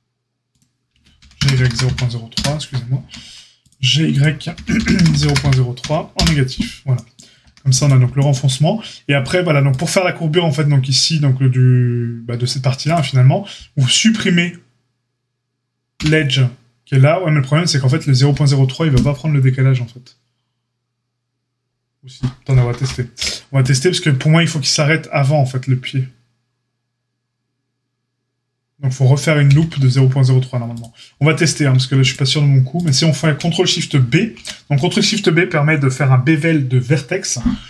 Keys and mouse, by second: 0.8 g, 2.9 ctrl+r, 4.5 g, 7.4 a, 9.6-12.9 drag, 12.9-32.0 middle drag, 15.9 x, 23.1 c, 29.4 x, 32.0-32.8 drag, 32.8-37.6 middle drag, 34.1 ctrl+shift+b.